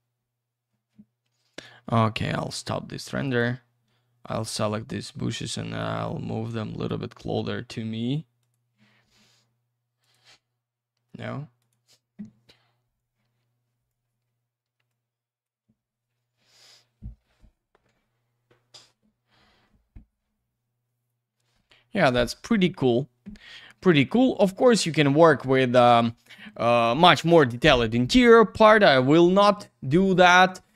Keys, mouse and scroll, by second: 1.5 click, 1.6 click, 2.3 click, 2.4 click, 3.2 click, 3.4 click, 4.2 ctrl+click, 4.3 ctrl+click, 4.8 w, 6.0 click, 8.4 click, 8.5 click, 10.0 click, 10.1 click, 11.6 click, 11.7 click, 12.9 click, 14.9 click, 20.6-21.0 scroll up 1, 21.0-22.3 scroll down 1, 29.2 click, 29.4 click, 30.2 click.